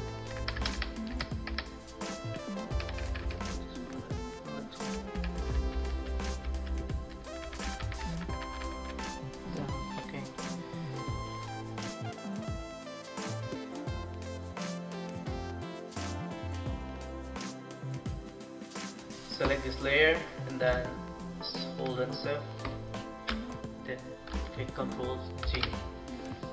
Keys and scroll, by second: 0.2 alt+shift+Right, 1.3 Right, 2.5 Down, 2.7 Down, 2.8 Down, 3.0 Down, 5.2 Down, 5.7 Down, 7.6 Down, 8.2 Down, 8.3 Up, 14.8 ctrl+t, 16.9 Up, 17.3 Up, 17.5 Up, 18.3 Down, 18.5 Down, 18.8 Return, 25.4 ctrl+g.